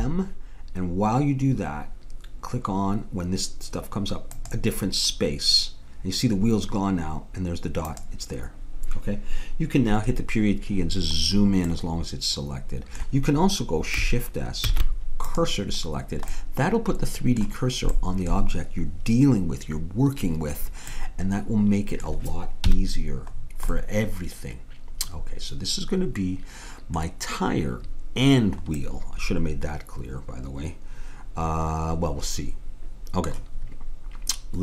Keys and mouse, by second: 7.9-9.7 drag, 9.9 KP_Decimal, 14.7 shift+s, 22.6 KP_Decimal, 28.8-30.4 middle drag.